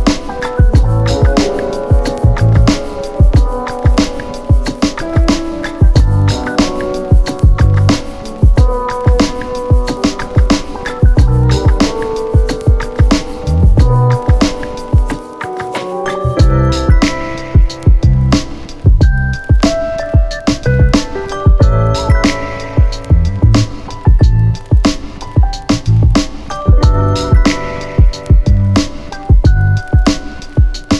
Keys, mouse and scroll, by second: 3.9-5.9 click, 6.1 ctrl+z, 6.7-8.0 click, 8.0 ctrl+z, 11.8-16.3 click, 16.9 ctrl+z, 19.5 click, 23.1 click, 26.0 Return, 28.5-29.7 click.